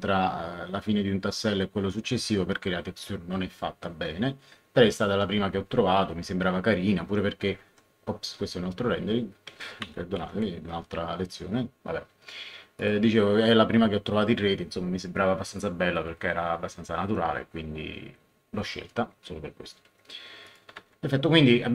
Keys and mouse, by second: 8.8 Escape, 9.8 Right, 10.1 Left, 12.7 click, 20.4 click, 20.8 ctrl+1.